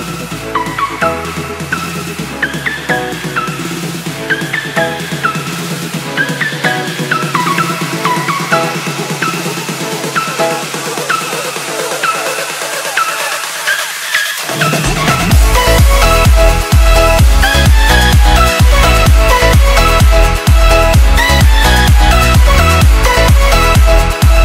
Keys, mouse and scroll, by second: 0.2 click, 1.1 Delete, 1.3 click, 2.7 alt+click, 3.4 Return, 5.1 click, 7.3 click, 8.7 Delete, 8.9 click, 10.1 Delete, 10.6 click, 11.0 Delete, 11.2 click, 12.5 ctrl+s, 14.3 click, 16.2 click, 17.7 ctrl+s, 19.1 click, 20.5 click, 21.1 Delete, 21.3 click, 22.5 ctrl+s, 23.7 click.